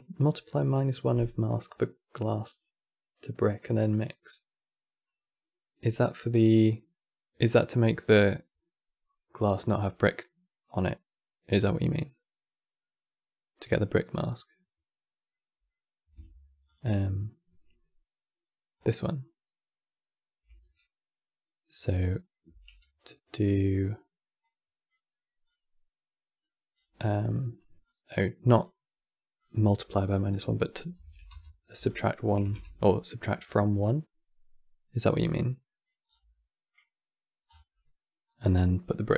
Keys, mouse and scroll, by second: 15.0-16.4 middle drag, 16.4 ctrl+shift+click, 18.5 ctrl+shift+click, 21.4 middle click, 22.2 q, 26.1 middle click, 26.5 scroll up 11, 27.5 click, 28.2-34.6 drag, 34.7 click, 35.8 scroll down 5, 36.0-37.2 middle drag, 37.2 scroll down 5, 37.4-39.1 middle drag.